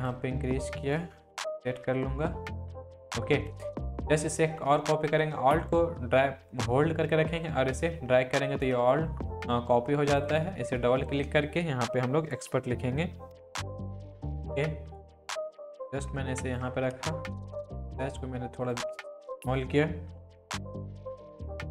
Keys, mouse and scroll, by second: 1.3 Down, 7.3-8.9 alt+drag, 13.0-14.4 typing, 14.2-17.3 drag, 15.3-16.8 shift+drag, 17.3 ctrl+t, 18.2-18.8 click, 20.1 Up.